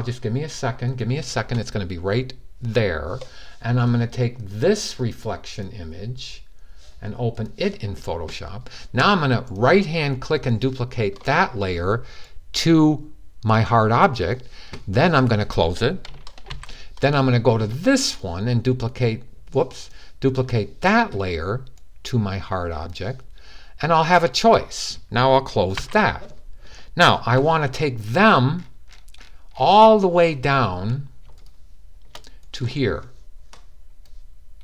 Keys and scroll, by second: 16.3 super+w, 25.5 super+w.